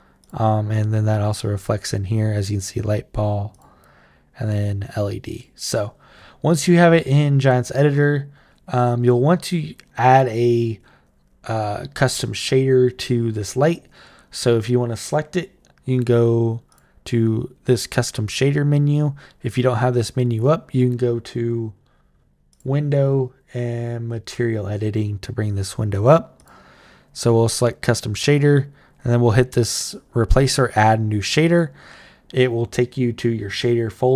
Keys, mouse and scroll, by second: 0.0 click, 1.3 click, 3.3 click, 5.2 click, 7.5 click, 8.8 click, 9.9 click, 16.5 click, 17.6 click, 22.3 click, 26.2 click, 31.2 click.